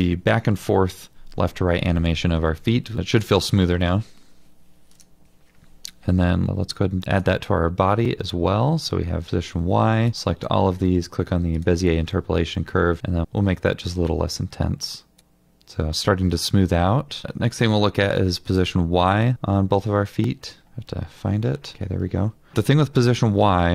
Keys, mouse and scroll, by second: 6.3-7.2 scroll up 1, 8.3 middle click, 19.3 ctrl+l, 20.3 scroll down 1, 20.6 middle click, 21.3 scroll up 1, 22.5 middle click.